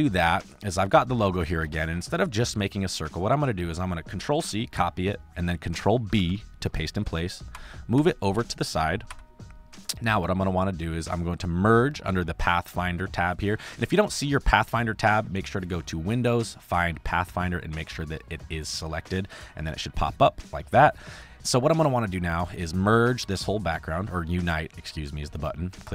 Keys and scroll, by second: 1.7 space, 4.3 ctrl+c, 6.1 ctrl+b, 7.4 Right, 9.1 Right, 9.7 space, 20.7 space.